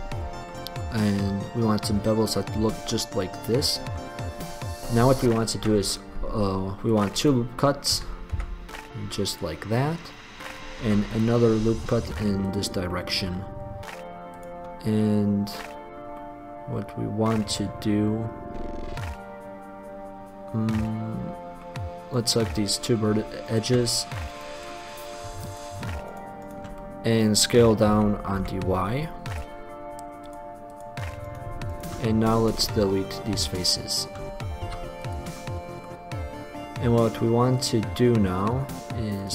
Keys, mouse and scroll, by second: 0.0 middle click, 3.5 click, 4.8 click, 5.8 ctrl+r, 7.4 click, 8.2 s, 9.0 click, 9.6 click, 9.9-11.0 middle drag, 11.0 ctrl+r, 13.0-15.2 middle drag, 15.2-16.2 drag, 16.4 click, 16.6-18.6 middle drag, 28.1 s, 29.6-31.2 drag, 32.2 middle click, 32.9-36.0 drag, 34.9 x, 38.2-39.3 middle drag.